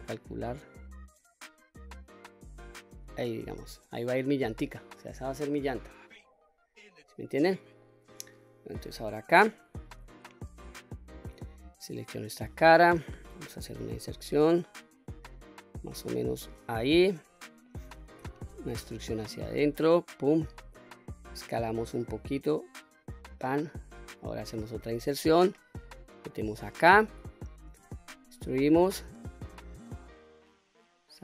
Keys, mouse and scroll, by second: 3.1 middle click, 4.2-4.6 scroll down 2, 4.6-6.8 middle drag, 7.2-7.7 scroll up 3, 7.7 middle click, 8.8 shift+middle click, 9.5-9.9 scroll up 1, 10.0-11.1 middle drag, 11.4 click, 12.3 middle click, 13.5 i, 16.5 click, 17.0 middle click, 18.1 e, 19.8 click, 20.2-21.2 middle drag, 21.5 s, 23.1 click, 23.5 middle click, 24.7 i, 26.1 click, 26.4 middle click, 27.6 e.